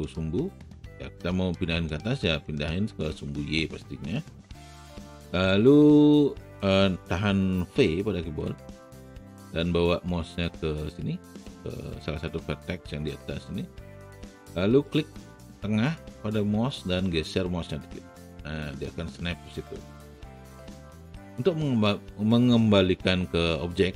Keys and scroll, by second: 8.6 v.